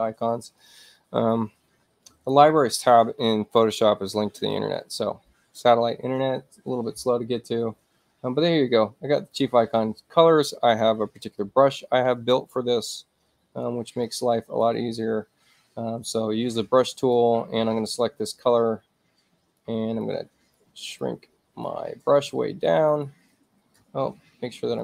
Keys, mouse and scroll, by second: 7.3-9.2 middle drag, 9.2 click, 14.1 alt+right click, 17.0 alt+click, 18.5-19.6 alt+right drag, 20.1 alt+right click, 21.1 alt+right click, 22.2 right click, 22.9 right click, 24.0 middle click.